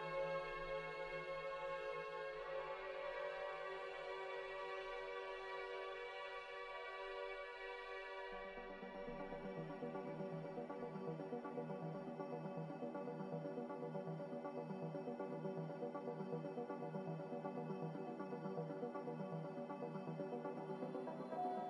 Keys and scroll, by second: 1.2 b, 4.1 ctrl+b, 20.9 a.